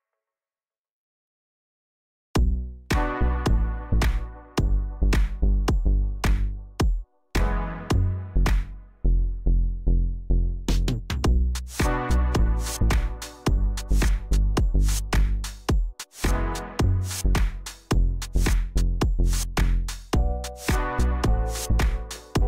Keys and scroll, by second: 3.2 ctrl+z, 3.8 ctrl+z, 9.7 j, 12.5 ctrl+i, 13.3 Delete, 15.3 shift+z.